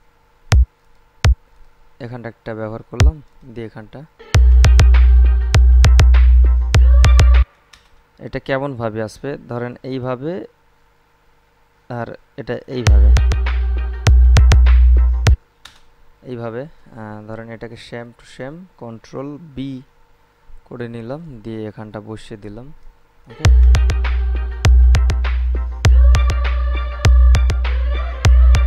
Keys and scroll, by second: 4.3 space, 7.5 space, 12.9 space, 15.5 space, 19.5 ctrl+b, 23.5 space.